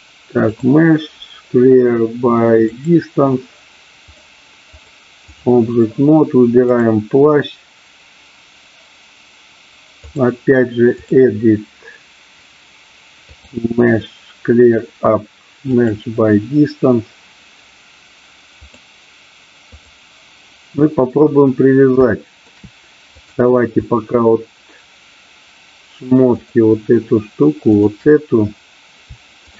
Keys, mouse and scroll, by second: 0.5-2.7 drag, 4.7 click, 6.6 click, 10.1-11.1 drag, 13.5-15.9 drag, 18.5-19.9 drag, 22.0 shift+middle click, 26.2 shift+click, 27.6 shift+click.